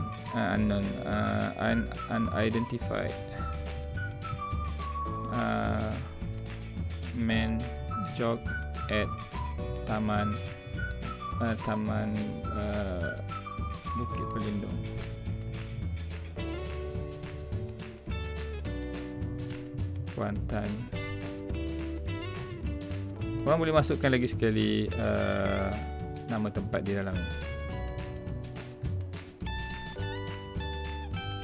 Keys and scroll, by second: 4.5 space, 7.4 space, 8.4 space, 9.0 space, 10.0 space, 15.2 space, 17.5 space, 19.2 space, 27.2 space, 30.4 space.